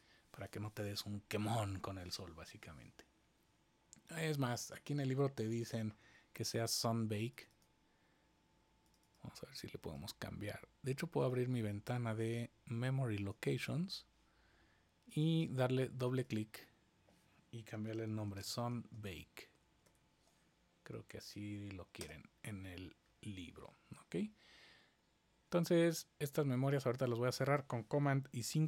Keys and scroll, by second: 17.6-20.3 typing, 21.9 Return, 28.4 super+5.